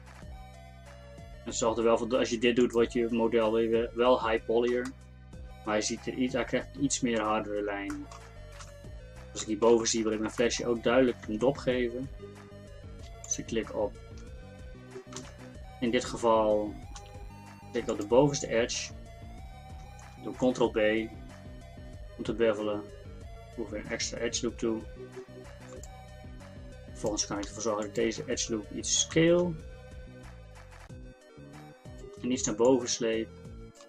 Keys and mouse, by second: 3.2 Tab, 3.5-5.8 middle drag, 8.7 KP_1, 11.3 Tab, 15.2 z, 17.0 z, 20.6 ctrl+b, 29.2 s.